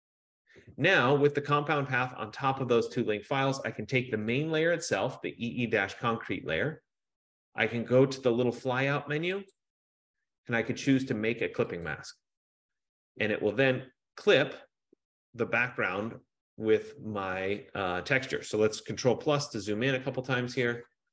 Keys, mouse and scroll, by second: 4.5 click, 9.7 click, 12.0 click, 15.9 F15, 19.6 ctrl+=, 19.9 ctrl+=, 20.5 ctrl+=.